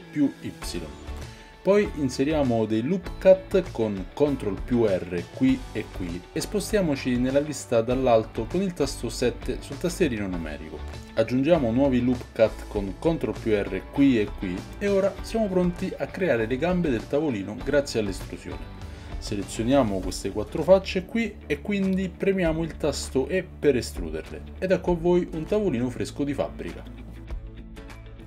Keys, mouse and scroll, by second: 3.1 ctrl+r, 6.0 ctrl+r, 8.1 KP_7, 9.8-20.4 shift+middle drag, 11.6 g, 13.3 ctrl+r, 14.4 ctrl+r, 19.5 Tab, 20.4 shift+click, 20.6-28.2 shift+middle drag, 23.2 e, 26.4 Tab, 27.2-28.2 drag.